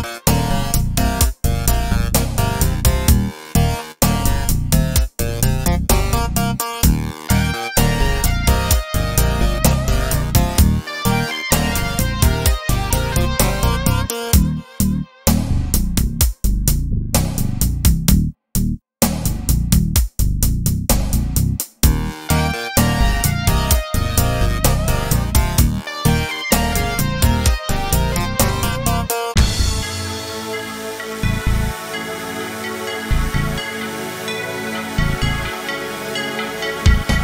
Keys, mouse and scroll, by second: 18.6-23.2 shift+middle drag, 20.0 scroll down 2, 20.5-21.9 scroll up 2, 21.9-22.5 scroll up 1, 22.5-23.2 scroll up 1, 23.2 click, 23.6-28.3 middle drag, 24.7 KP_Decimal, 25.9-27.2 scroll up 2, 27.2-28.3 scroll up 1, 28.3-29.3 drag, 31.2-35.3 drag, 34.5 KP_Decimal.